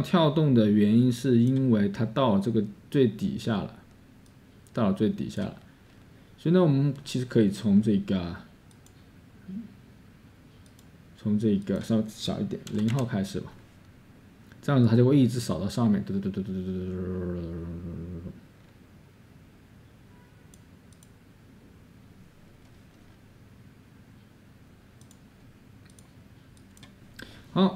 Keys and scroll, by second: 12.7 0.